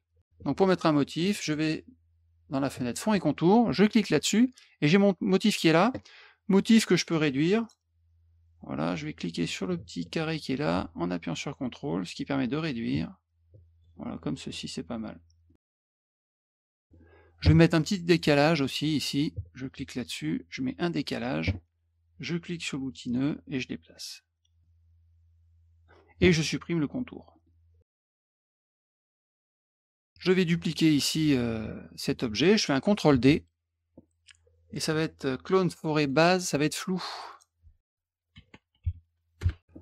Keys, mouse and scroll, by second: 1.4 click, 3.8 click, 7.6 click, 10.4-13.8 ctrl+drag, 14.1 middle click, 15.0 middle click, 15.8 middle click, 16.0 middle click, 16.6 click, 16.7 middle click, 18.1 click, 19.7 click, 21.0 click, 23.0 click, 24.6-25.8 drag, 27.3 middle click, 27.9 middle click, 28.6 click, 30.0 click, 33.1 ctrl+d, 36.0 click, 36.1 click, 36.5 click, 37.1 click, 38.1-39.3 typing, 39.4 Return.